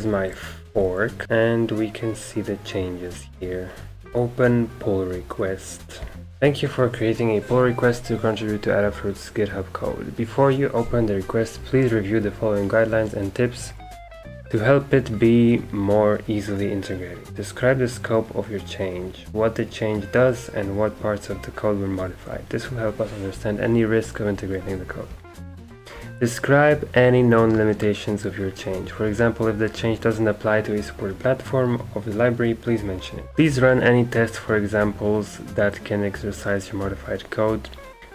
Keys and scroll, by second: 0.7 ctrl+r.